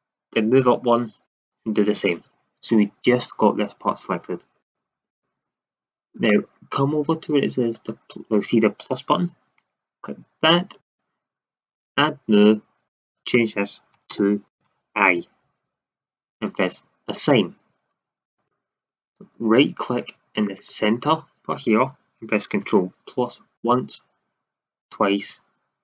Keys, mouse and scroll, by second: 1.2-4.6 drag, 4.6-6.5 middle drag, 10.7-15.5 drag, 17.1 click, 23.5 ctrl+KP_Add, 24.8 ctrl+KP_Add.